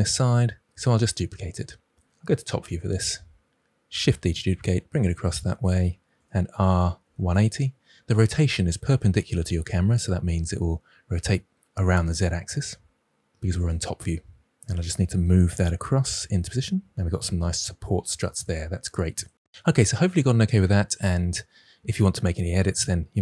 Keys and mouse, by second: 2.5 KP_7, 4.1 shift+d, 5.2-5.5 drag, 6.1 r, 7.0 1, 7.0 8, 7.1 0, 12.5 g, 15.7 g, 16.3 x.